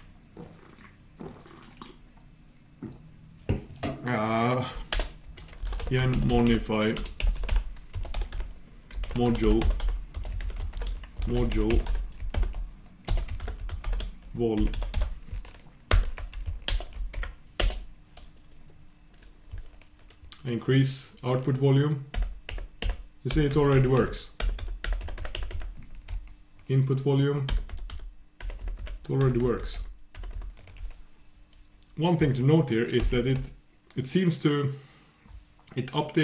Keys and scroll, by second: 16.8 shift+super+Return, 22.1 super+\, 23.9 super+', 24.4 super+', 24.6 super+'.